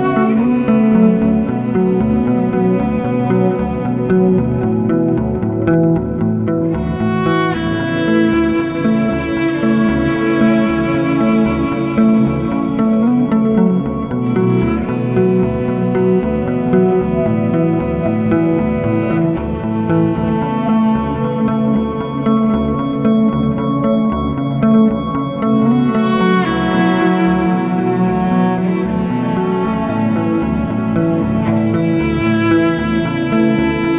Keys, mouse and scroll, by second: 0.2 ctrl+shift+Left, 0.7 drag, 26.2-28.5 drag, 28.5 scroll up 5, 28.8-33.9 shift+middle drag.